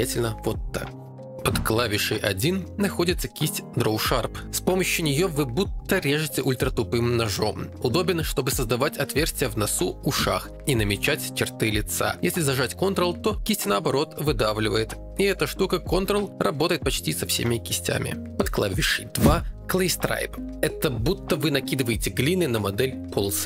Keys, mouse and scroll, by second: 8.5 click, 9.4 click, 13.2 f, 15.0 ctrl+click, 20.2 click.